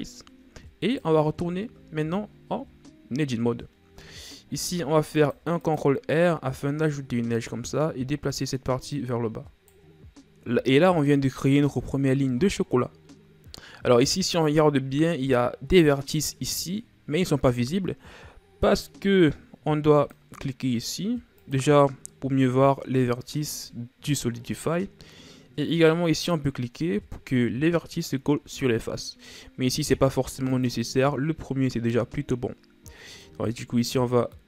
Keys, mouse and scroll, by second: 0.2-0.8 shift+scroll up 2, 0.8 right click, 1.3 Tab, 2.3-4.5 shift+scroll down 2, 4.5 ctrl+r, 6.9 right click, 8.9 right click, 9.9-12.2 scroll up 2, 14.9-17.9 scroll up 1, 19.9-24.4 drag, 26.1-29.1 drag, 30.5-33.2 drag, 33.2 right click.